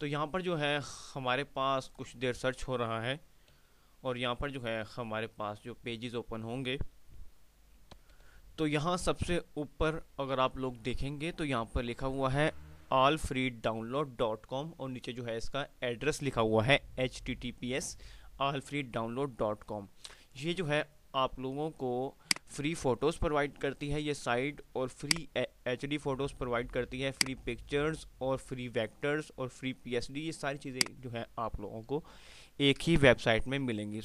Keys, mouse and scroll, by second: 8.4 F5, 22.3-30.9 drag, 30.9 click.